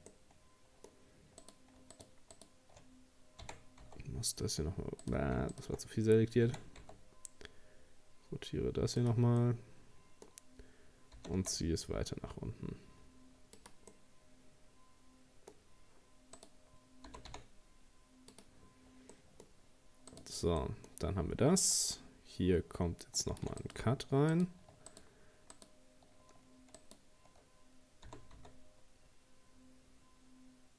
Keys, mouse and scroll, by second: 0.1-1.4 middle drag, 1.4 right click, 1.9 shift+right click, 2.3 shift+right click, 3.4 r, 5.6 shift+right click, 6.5 r, 9.4-11.2 middle drag, 11.2 g, 13.9-15.6 middle drag, 15.6 scroll up 2, 16.4 right click, 17.1 g, 19.1 middle click, 19.6-20.1 scroll up 1, 20.1 right click, 20.6-21.9 middle drag, 21.9 ctrl+r, 24.3 right click, 24.9 shift+right click, 25.5 shift+right click, 26.8 shift+right click, 28.1 g.